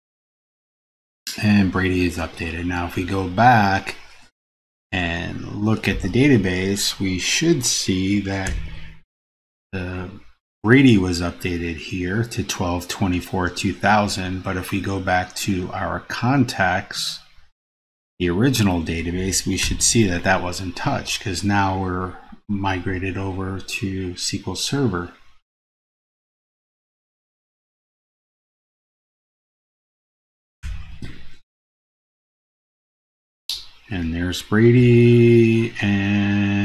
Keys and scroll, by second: 8.6 super+Page_Down, 19.8 super+Down, 30.8 super+Down.